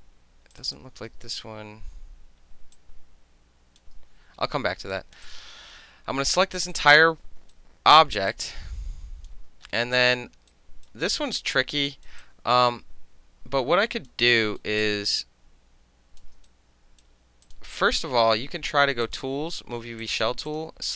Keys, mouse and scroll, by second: 0.6 alt+click, 0.7 alt+click, 1.4 space, 2.8 click, 4.7 middle click, 4.9 click, 5.2 middle click, 5.3 click, 5.3-6.7 middle drag, 6.6 click, 6.7 click, 6.8-7.5 middle drag, 7.5 alt+right click, 7.9 alt+middle click, 8.3 alt+click, 9.3 alt+middle click, 10.0 alt+click, 10.5 alt+right click, 11.2 alt+click, 11.9 alt+right click, 12.2-14.1 alt+drag, 14.1 alt+middle click, 14.5 alt+middle click, 14.8-16.2 alt+drag, 16.2 alt+middle drag, 16.5-17.0 alt+right drag, 17.0 alt+middle drag, 17.5 click, 19.1 click, 20.0 click, 20.5 click.